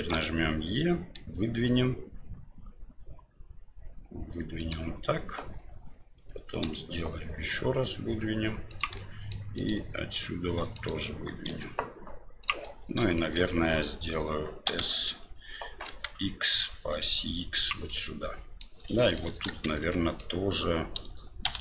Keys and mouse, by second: 0.1 e, 6.6 e, 9.1 middle click, 9.5 right click, 10.6 3, 10.7 right click, 11.5 e, 12.8 middle click, 13.3 shift+middle click, 14.6 s, 18.0 middle click, 19.1 shift+middle click, 19.6 shift+z, 19.9 middle click, 21.4 1.